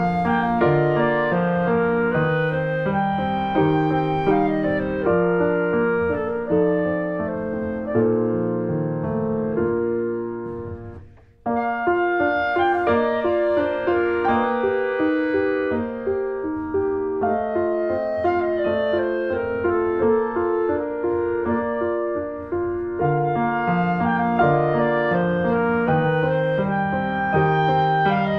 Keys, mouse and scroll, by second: 0.2-1.3 drag, 1.3 scroll up 1, 1.4 click, 2.1 ctrl+z, 2.2-3.4 drag, 3.4 shift+middle click, 3.6-4.8 drag, 4.8 shift+middle click, 5.2 click, 5.6 shift+middle click, 5.6-6.1 shift+scroll up 2, 6.1 click, 6.6 shift+middle click, 6.8 ctrl+z, 6.9-8.3 drag, 8.3 shift+middle click, 9.2-12.3 shift+drag, 12.3 scroll down 3, 12.4 shift+middle click, 12.5-13.1 shift+scroll up 3, 12.9 click, 13.1 shift+middle click, 13.4 click, 14.3 ctrl+z, 14.4 click, 15.1 shift+middle click, 15.4 click, 15.4 shift+middle click, 15.5-15.9 scroll up 1, 15.9 shift+middle click, 16.2 click, 16.8 ctrl+z, 17.0-18.9 ctrl+drag, 18.9 scroll down 1, 19.0 shift+middle click, 19.1-19.4 scroll up 2, 19.4 shift+middle click, 19.6 click, 20.2 scroll up 1, 20.2 shift+middle click, 20.4 click, 21.2 scroll up 1, 21.4 click, 21.8 shift+middle click, 22.1 ctrl+z, 22.2-24.6 drag, 24.6 middle click, 24.8 scroll down 2, 25.0 middle click, 25.1 scroll up 1, 25.3-26.7 drag, 26.7 scroll down 1, 26.9-28.3 shift+drag.